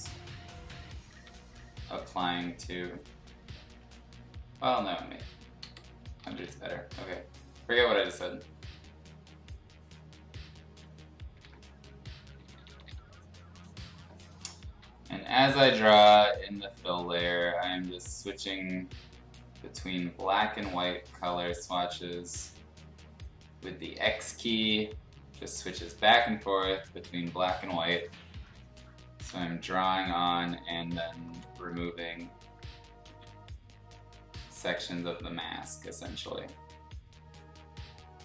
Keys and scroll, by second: 1.1 ], 3.1 ctrl+z, 4.5 ctrl+z, 5.6 0, 6.2 [, 6.4 [, 7.9 ctrl+z, 10.6 x, 11.4 ctrl+z, 12.2 [, 12.4 [, 12.6 [, 12.8 [, 14.8 x, 15.7 ], 15.9 ], 16.0 ], 20.6 ctrl+z, 21.2-21.9 typing, 24.4 z, 27.0 z, 27.9 ], 28.1 ], 29.2 ctrl+z, 30.3 ctrl+z, 31.1 [, 31.3 [, 31.5 [, 31.7 [, 33.0 ctrl+z, 36.2 ctrl+z.